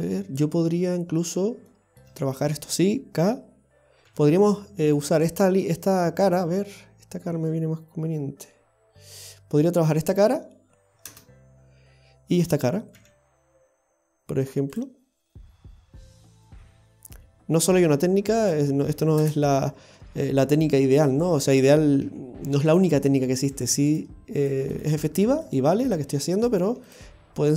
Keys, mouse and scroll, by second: 0.7 middle click, 1.7 shift+middle click, 4.1 k, 19.7-20.7 scroll up 1, 21.1 right click, 22.1 x, 23.6 right click, 23.7 x, 24.4 right click, 25.5 right click, 26.5 right click.